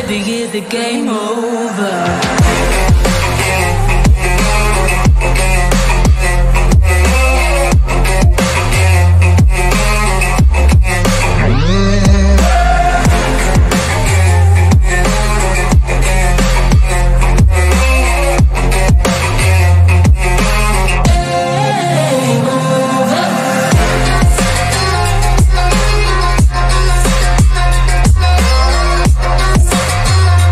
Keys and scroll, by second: 1.2 F3, 1.5 shift+F2, 17.7 ctrl+z.